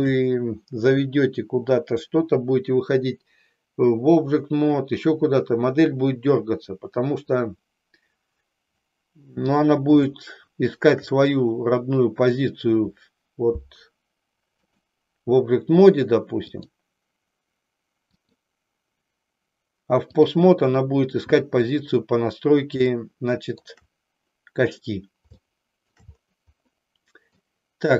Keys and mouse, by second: 10.0-11.0 shift+middle drag, 14.8-16.8 drag, 18.2-20.3 drag, 22.9 shift+middle click, 25.3 shift+middle click, 26.9 middle click.